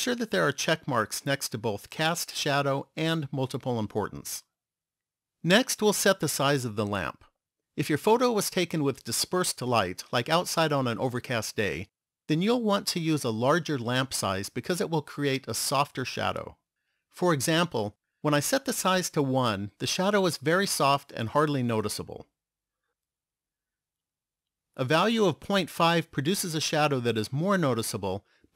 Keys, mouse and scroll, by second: 17.4 click, 23.9 click.